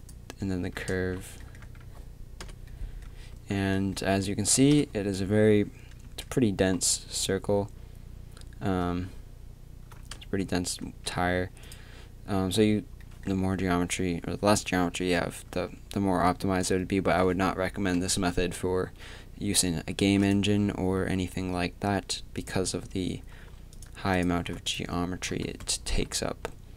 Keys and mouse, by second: 0.9 Tab, 1.6 a, 2.4 l, 3.3 a, 4.7 KP_3, 6.1 Tab, 10.2 Tab, 10.8 Tab, 20.1 x, 22.7-24.7 drag, 25.3 KP_3, 25.9 s.